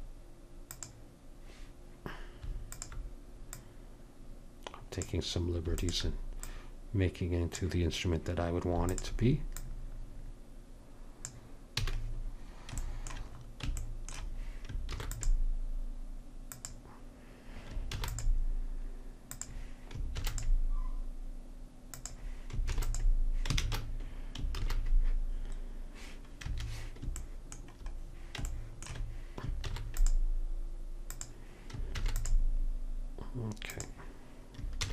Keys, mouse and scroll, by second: 2.8-5.5 drag, 5.9-8.4 drag, 9.0-11.5 drag, 11.9 a, 14.9 ctrl+r, 18.0 ctrl+r, 20.2 ctrl+r, 22.8 ctrl+r, 23.7 ctrl+shift+r, 29.8 ctrl+r, 32.0 ctrl+r, 34.8 ctrl+r.